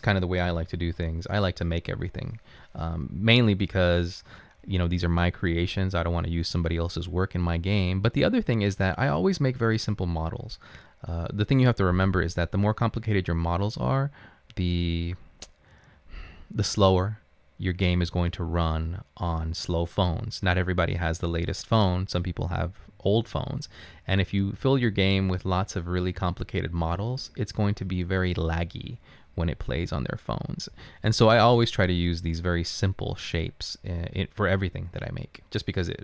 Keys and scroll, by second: 0.6-1.1 typing.